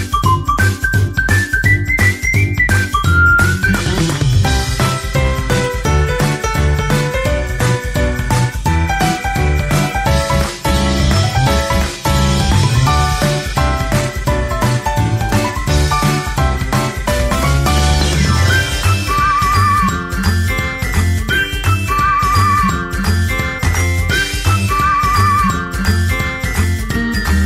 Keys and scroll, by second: 4.8 ctrl+t.